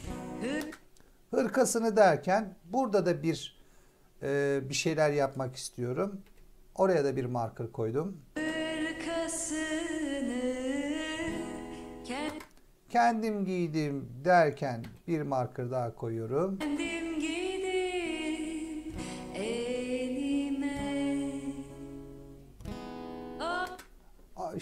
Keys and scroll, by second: 0.5 space, 6.1 m, 8.2 space, 12.2 space, 14.7 m, 16.5 space, 23.5 space.